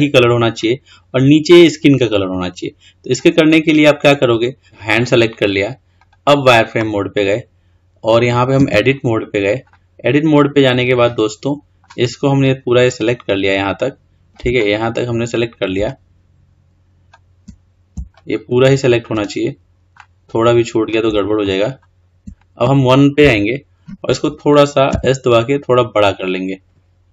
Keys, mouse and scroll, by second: 0.8 scroll down 2, 2.2-3.0 scroll up 3, 3.0-3.7 scroll down 2, 3.7-4.6 scroll up 1, 4.6 click, 6.3 click, 8.8 Tab, 9.9-12.6 middle drag, 12.6 click, 16.0 shift+click, 18.3 shift+click, 20.2-21.6 middle drag, 21.6 shift+click, 22.1-23.4 shift+middle drag, 23.4 KP_1, 25.1 s.